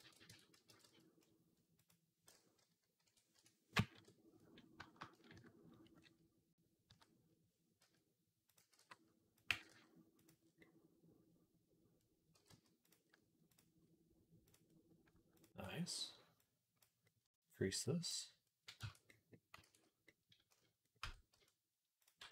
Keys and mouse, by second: 0.4 Tab, 0.4 a, 0.5 g, 3.8 KP_3, 5.2 KP_Decimal, 6.7 s, 8.4 s, 9.3-15.3 middle drag, 9.3 g, 12.2 g, 13.3 click, 14.3 click, 15.3-18.9 ctrl+drag, 18.6 Tab, 19.0-22.3 drag, 19.5 ctrl+s, 20.8 Tab, 21.2 z, 22.0 b.